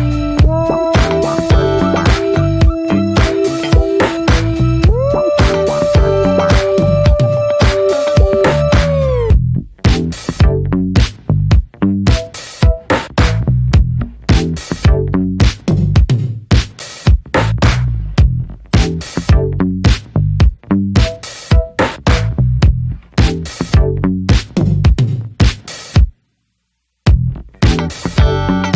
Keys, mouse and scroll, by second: 0.0 a, 0.6 right click, 1.2 ctrl+s, 1.4 scroll down 1, 1.6 middle click, 1.8 Tab, 1.9 click, 2.1 ctrl+s, 2.6 /, 3.4 ctrl+s, 3.4 ctrl+click, 3.7-4.4 middle drag, 4.4 ctrl+s, 4.5 scroll down 1, 4.7-5.1 middle drag, 5.1 Tab, 5.9 scroll up 2, 6.1 s, 8.5 drag, 8.7 scroll down 1, 8.8 ctrl+s, 9.0-9.8 middle drag, 9.8 ctrl+s, 10.2-11.9 shift+drag, 11.9-12.6 middle drag, 12.6-14.0 ctrl+drag, 14.0 ctrl+j, 14.7 scroll down 1, 14.9 ctrl+s, 15.0-15.4 drag, 15.4-16.0 scroll down 2, 16.0 g, 17.1-17.5 shift+middle drag, 17.5 ctrl+s, 17.8 drag, 18.1 shift+middle click, 18.2 scroll up 2, 18.4 ctrl+s, 18.7 middle drag, 18.9-19.4 scroll up 2, 19.1 shift+middle click, 19.4 ctrl+s, 19.6-20.0 shift+drag, 20.0-20.5 middle drag, 20.5 ctrl+j, 21.7 click, 21.9 scroll down 1, 22.0-22.7 shift+middle drag, 22.7 ctrl+s, 22.8 click, 22.9 scroll down 1, 23.1-24.2 middle drag, 24.2 h, 25.7-26.0 drag, 26.0 shift+middle click, 26.1 scroll up 1, 26.3 middle click, 26.5 ctrl+s, 26.8 shift+middle click, 27.4 scroll down 1, 27.6 a.